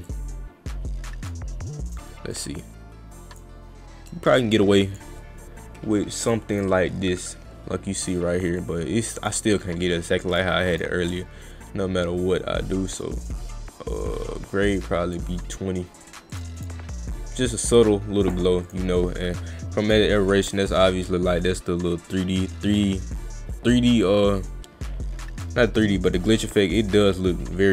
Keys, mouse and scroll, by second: 0.1-1.3 drag, 2.4-3.4 drag, 4.1 click, 6.2 click, 6.6 click, 8.6 click, 10.7 click, 12.2-15.2 drag, 16.3 click, 16.6 click, 18.2 click, 18.7 click, 20.7-25.4 drag, 26.7 click, 27.0 click.